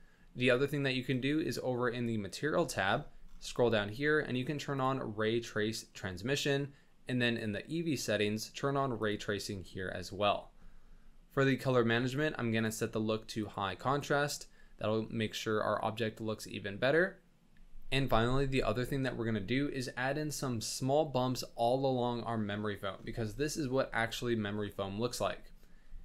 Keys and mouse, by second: 1.1 click, 4.8 click, 7.2 click, 9.0 click, 11.4 click, 12.6-13.6 drag, 15.1-17.5 middle drag.